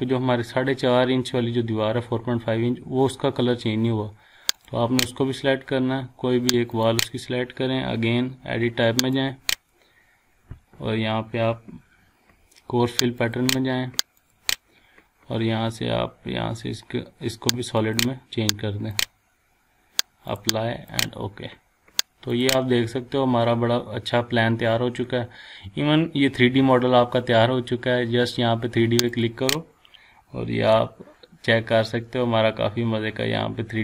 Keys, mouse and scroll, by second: 0.4-0.9 scroll down 1, 1.3 scroll up 1, 3.5 scroll down 1, 4.6 click, 6.0 scroll up 1, 6.7 click, 9.0 click, 13.2 click, 13.2 click, 15.3-15.7 scroll down 1, 16.8-17.8 scroll up 1, 17.8 click, 21.4 scroll down 1, 22.3 click, 22.6-23.0 scroll down 1, 23.4 scroll up 1, 23.9-24.4 scroll down 1, 29.1 click, 30.7-33.8 shift+middle drag.